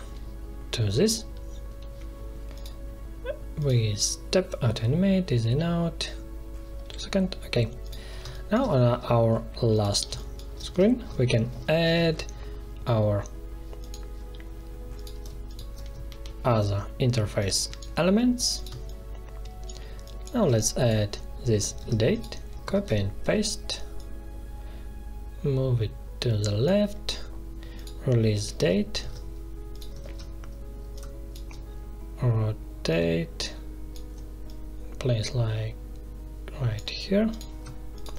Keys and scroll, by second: 8.2 space, 10.0 space, 11.8 alt+1, 16.0 ctrl+shift+], 18.6 space, 21.7 ctrl+c, 22.7 ctrl+v, 28.2 ctrl+l, 28.9 ctrl+c, 30.0 ctrl+v.